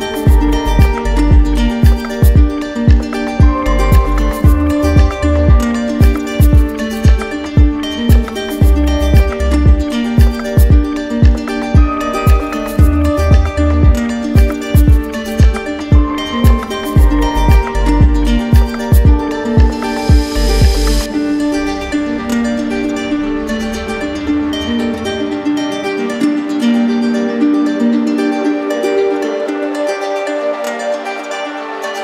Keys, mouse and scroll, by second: 0.1 click, 1.2 click, 1.7 click, 3.2 click, 3.5 ctrl+z, 4.6 alt+click, 5.9 shift+click, 6.7 click, 7.4 click, 9.8 click, 11.4 alt+click, 12.8 ctrl+z, 16.1 shift+click, 17.0 right click, 18.1 click, 18.6 ctrl+z, 19.6 shift+click, 19.9 shift+click, 20.4 right click, 20.6 z, 25.7 click, 26.6 right click, 27.2 right click.